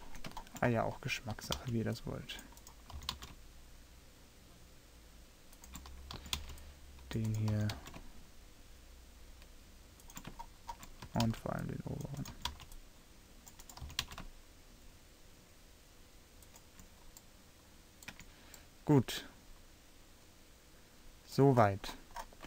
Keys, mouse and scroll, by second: 1.5 a, 1.6 c, 3.1 g, 5.3 click, 6.3 a, 6.5 c, 7.7 g, 11.1 a, 11.3 c, 12.4 a, 12.6 c, 14.0 g, 18.3 Tab, 20.6-21.6 middle drag.